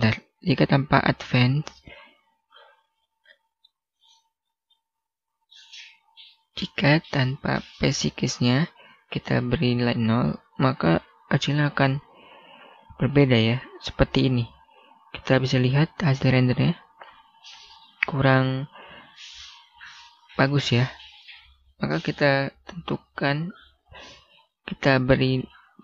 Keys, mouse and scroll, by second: 1.4 click, 2.6 scroll up 1, 2.9 middle click, 4.0 click, 4.3-5.9 scroll down 1, 5.9 click, 8.8 0, 9.3 Return, 10.2-10.9 scroll up 1, 10.9 F12, 18.6 Escape, 21.3 click, 22.0 typing, 22.9 Return.